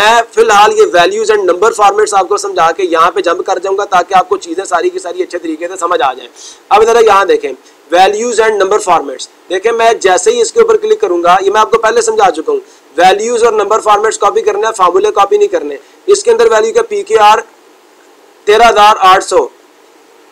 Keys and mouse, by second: 10.3-11.4 drag, 15.3-16.4 drag.